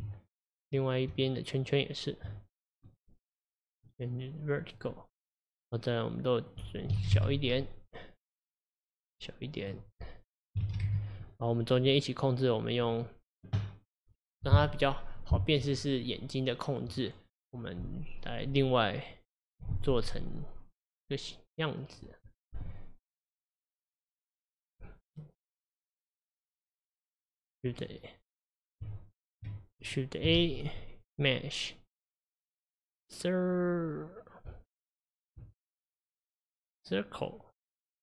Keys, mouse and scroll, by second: 0.0 Tab, 0.6 click, 1.1 Tab, 2.9 click, 3.8 click, 6.5-8.5 drag, 9.6-12.0 drag, 28.9 Tab, 29.8 click, 30.4 shift+a.